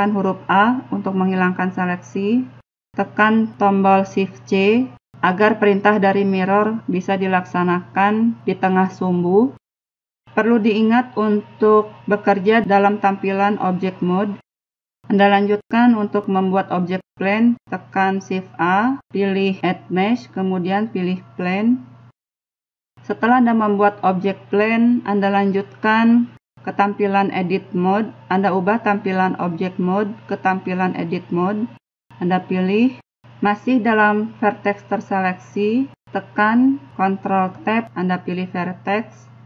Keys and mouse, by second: 3.8-6.4 middle drag, 18.2 shift+a, 31.2 click.